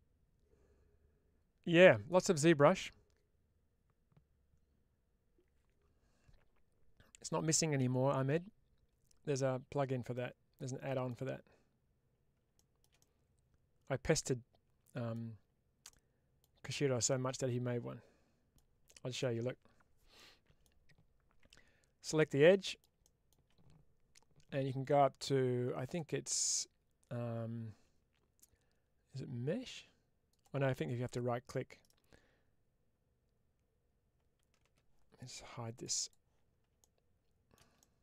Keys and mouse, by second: 10.0 middle click, 12.9-15.0 middle drag, 15.7 middle click, 16.9-18.4 middle drag, 20.0 middle click, 21.3 2, 22.0 click, 22.4 middle click, 25.9-30.7 drag, 36.7 middle click.